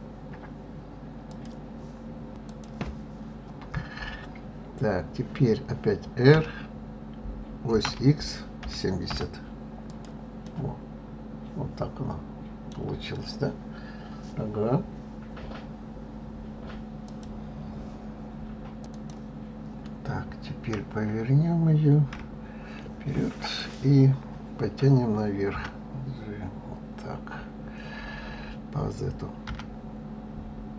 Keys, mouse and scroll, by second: 6.2 r, 10.3-13.3 middle drag, 20.5 KP_3, 21.9 KP_1, 23.3 click, 25.3 g.